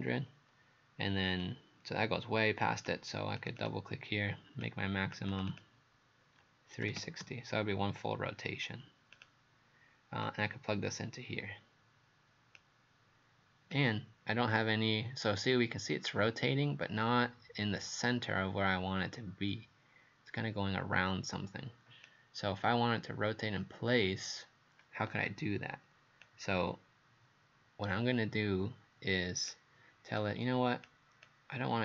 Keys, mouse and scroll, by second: 1.4 click, 3.6 click, 4.7 click, 5.3 click, 5.5 click, 6.9 KP_3, 7.0 KP_6, 7.2 KP_0, 9.2 click.